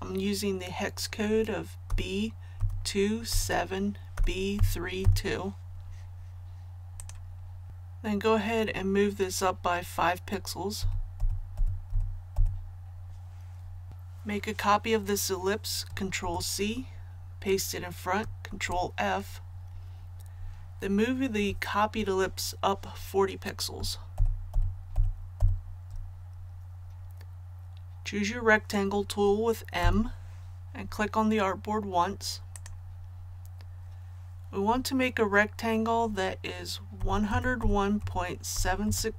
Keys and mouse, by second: 1.9-5.0 typing, 7.0 click, 10.8 Up, 11.2 Up, 11.5 Up, 11.9 Up, 12.3 Up, 13.9 click, 16.2 ctrl+c, 18.5 ctrl+f, 24.1 shift+Up, 24.5 shift+Up, 24.9 shift+Up, 25.4 shift+Up, 29.8 m, 32.5 click, 37.0-39.1 typing.